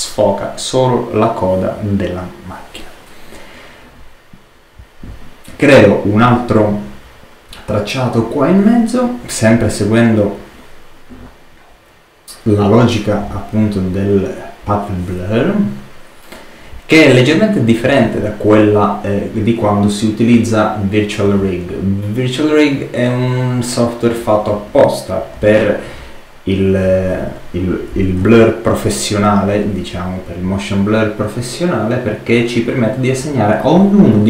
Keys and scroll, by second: 28.1 super+z.